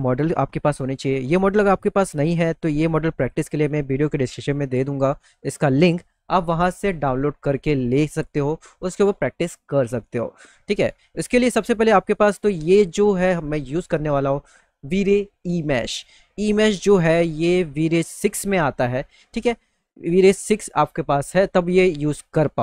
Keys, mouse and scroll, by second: 1.4 click, 1.9 click, 2.4 click, 3.1 click, 4.0 click, 4.4 click, 5.2 click, 5.9 click, 10.6 alt+middle click, 11.3 middle click.